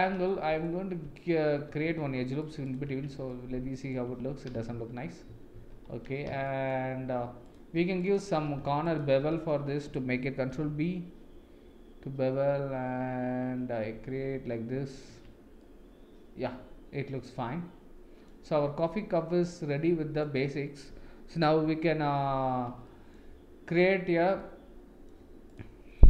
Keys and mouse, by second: 0.3 middle click, 1.7 ctrl+r, 3.0 Tab, 3.3 middle click, 4.0 Tab, 4.8 ctrl+z, 5.3 ctrl+z, 5.5 ctrl+z, 6.5 shift+middle click, 10.5 ctrl+b, 15.2 Tab, 15.6-18.3 middle drag, 19.0-20.2 middle drag, 21.6 KP_7, 22.8 shift+middle drag, 24.4-25.1 middle drag.